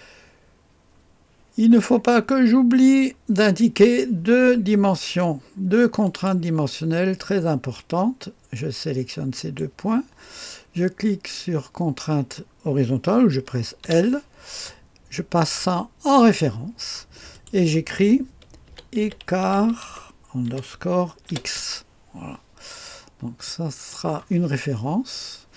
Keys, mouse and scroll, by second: 1.9-2.8 scroll up 1, 2.8-6.0 scroll up 1, 6.0 click, 6.6 click, 9.3 click, 13.8 typing, 16.2 click, 17.3 click, 18.4-21.2 typing, 23.4-24.6 drag.